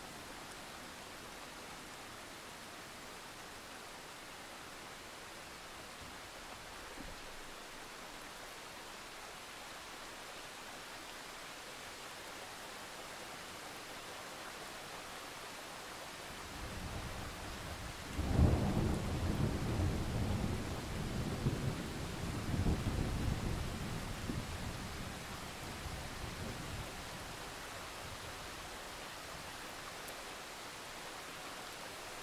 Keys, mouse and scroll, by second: 0.2 click, 0.5 alt+scroll down 1, 0.7-1.1 scroll up 1, 1.1-2.2 ctrl+scroll down 2, 2.2-3.6 ctrl+scroll down 1, 3.6 click, 4.7-5.3 scroll up 1, 5.3 right click, 5.6-10.7 drag, 11.4-13.1 drag, 13.1-13.5 ctrl+scroll down 1, 13.5 click, 16.0 scroll down 1, 16.5 click, 16.7-17.1 scroll down 1, 17.2 alt+scroll up 1, 17.7 click, 19.4 alt+click, 20.4 shift+click, 20.7 shift+click, 21.9 right click, 22.7 click, 23.1 alt+scroll down 1, 23.3-23.8 scroll up 1, 23.9-24.5 alt+scroll down 2, 24.5 click, 24.8 right click, 25.1-28.7 drag, 28.7 right click, 29.5 click.